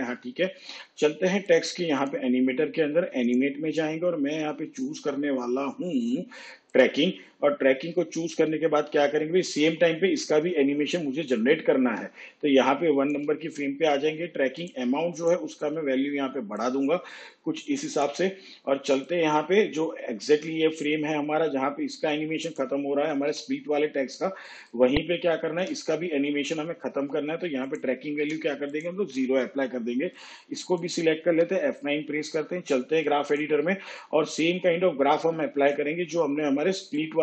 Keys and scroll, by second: 23.3 u, 28.2 0, 31.3 F9.